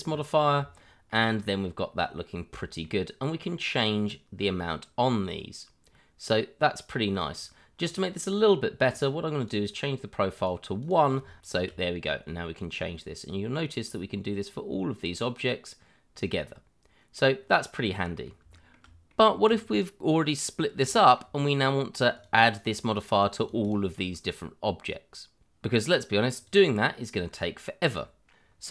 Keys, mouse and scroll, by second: 0.8 shift+middle click, 1.2-1.6 scroll up 1, 1.6 middle click, 3.7 click, 7.8-9.3 scroll up 1, 9.3 click, 10.4 double click, 11.1 1, 11.4-11.8 scroll down 1, 11.8 middle click, 12.5 click, 15.2 click, 17.4-17.7 scroll down 1, 18.0 middle click, 18.5 shift+middle click, 19.1 middle click, 19.5 click, 20.9 shift+middle click, 22.1 click, 22.6 double click, 26.3 click.